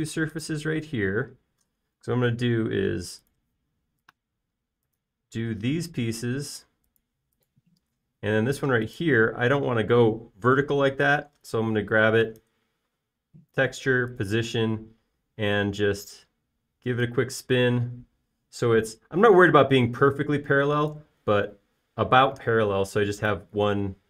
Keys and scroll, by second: 2.4 space, 3.9-4.3 typing, 13.0 space.